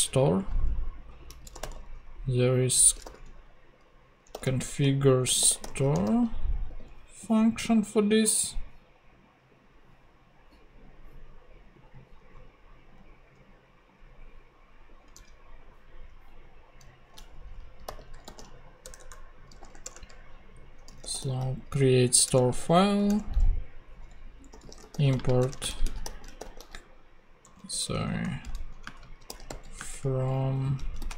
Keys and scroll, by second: 1.3-6.2 typing, 15.1 super+Tab, 17.8 super+n, 18.2 super+f, 18.4-19.5 typing, 19.8 Return, 20.8 s, 21.1 o, 22.2 Return, 24.3-27.4 typing, 28.4 super+BackSpace, 28.5 super+Right, 28.8 super+space, 29.0 f, 29.5 m, 29.8 space, 30.8 a.